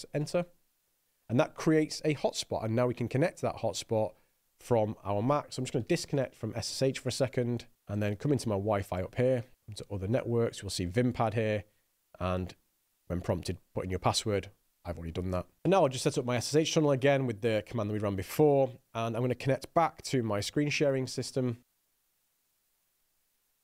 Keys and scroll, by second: 0.6 Return, 6.0-7.0 typing, 16.1 Up, 16.8 Return, 21.6-23.6 typing, 22.3 Return.